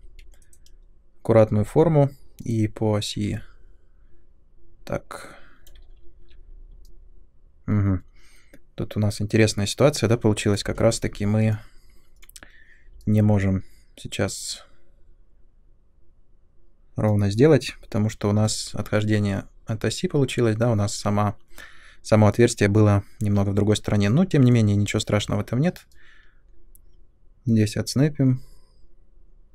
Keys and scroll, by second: 5.9 ctrl+1.